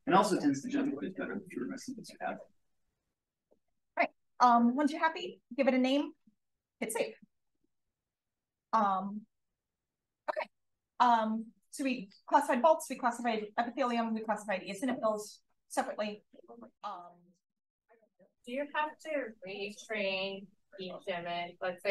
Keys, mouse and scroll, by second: 6.7 click.